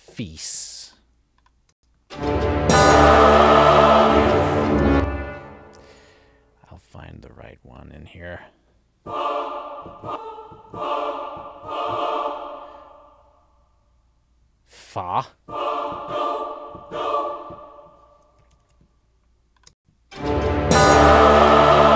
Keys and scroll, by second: 1.8 space, 4.9 space, 18.6 alt+Down, 20.8 space.